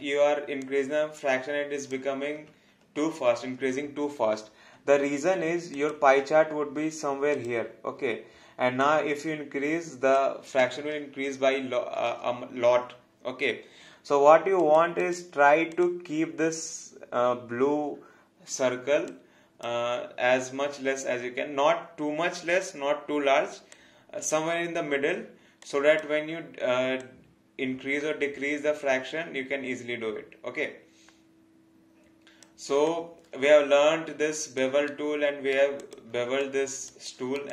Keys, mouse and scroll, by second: 3.0 ctrl+z, 5.7 click, 14.5 click, 19.0 click, 23.7 click, 25.6 alt+click, 32.9 alt+click, 34.9 right click, 35.8 click, 36.4 alt+click.